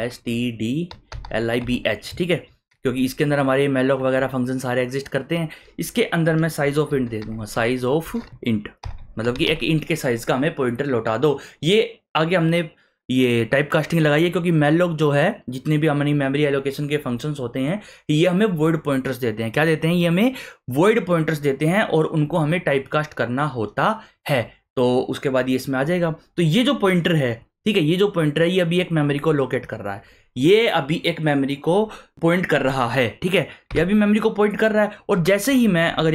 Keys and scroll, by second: 0.0-1.8 typing, 6.6-9.9 typing, 33.7 Return, 33.7 \.